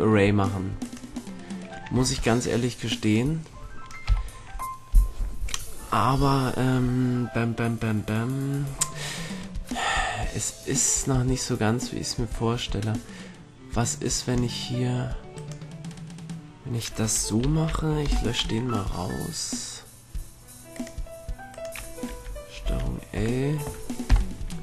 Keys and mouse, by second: 1.1-2.3 middle drag, 2.1 ctrl+Tab, 4.2 KP_3, 11.1-13.4 drag, 15.5-17.5 right drag, 17.5 ctrl+l, 18.2 Delete, 22.8 ctrl+l, 24.2 KP_3.